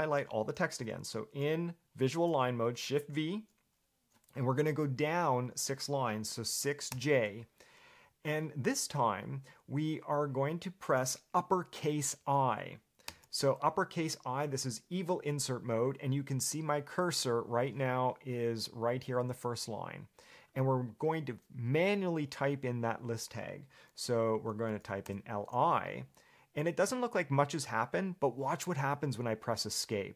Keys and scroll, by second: 3.1 shift+v, 6.7 6, 7.1 j, 13.3 shift+i, 24.2-26.0 typing.